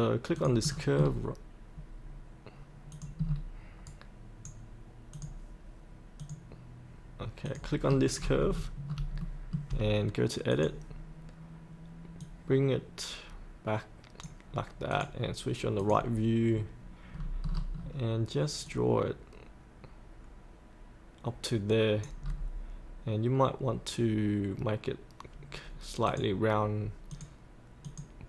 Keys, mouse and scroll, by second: 0.7 scroll down 1, 2.9 click, 3.2-3.6 scroll down 1, 3.8-5.1 right drag, 5.1 click, 7.8-8.2 scroll up 1, 9.2 shift+middle click, 10.5 click, 11.2-14.3 drag, 17.1 scroll down 1, 17.7 scroll down 1, 18.6-22.2 drag, 26.1 click.